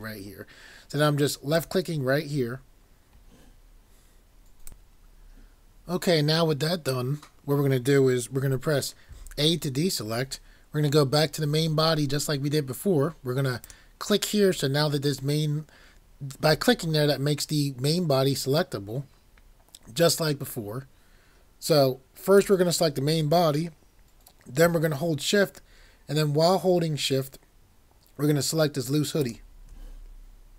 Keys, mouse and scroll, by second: 1.6 click, 9.1 a, 13.6 click.